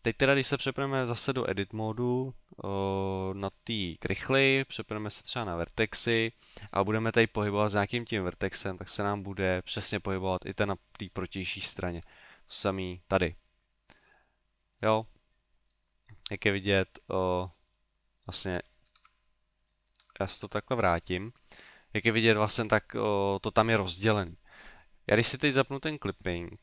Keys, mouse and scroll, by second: 0.1 middle click, 4.2 ctrl+Tab, 6.1 right click, 7.3 g, 9.1 click, 9.4 middle click, 10.5 middle click, 11.5 right click, 12.1 g, 14.8 click, 15.1 middle click, 16.6 click, 17.7 click, 18.9 ctrl+z, 19.7 middle click, 19.9 ctrl+z, 20.4 ctrl+z, 21.1 middle click, 25.7 click.